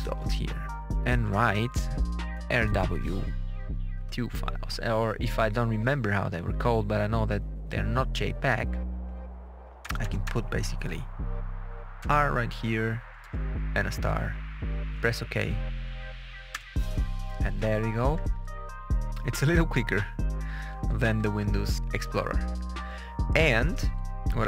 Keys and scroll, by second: 2.2 r, 2.6 w, 3.9 2, 9.7 BackSpace, 11.9 r, 13.1 shift++, 16.4 Return, 17.9 Page_Down, 19.3 Page_Up, 20.6 Page_Down, 21.8 Page_Up, 23.5 Page_Down.